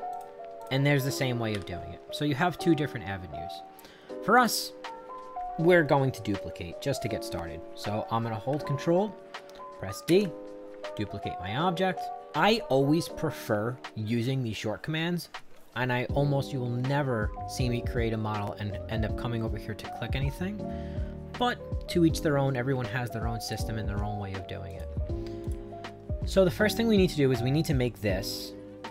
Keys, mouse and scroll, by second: 0.1 click, 0.6 click, 4.4 click, 10.1 ctrl+d, 11.0-12.2 drag, 23.4 click, 24.7 click, 25.4 click.